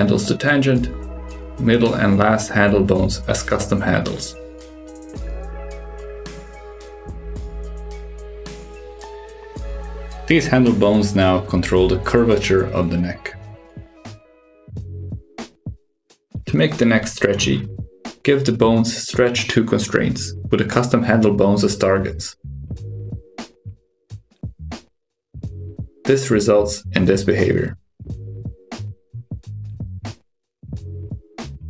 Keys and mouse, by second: 1.0-2.1 drag, 3.0-5.6 drag, 6.6-10.8 drag, 11.8 r, 13.8 drag, 14.2 r, 16.1 click, 16.8 shift+click, 18.1 ctrl+shift+c, 22.8 click, 23.3 shift+click, 24.2 ctrl+shift+c, 26.9 click, 27.2 g, 30.3 click, 30.5 g.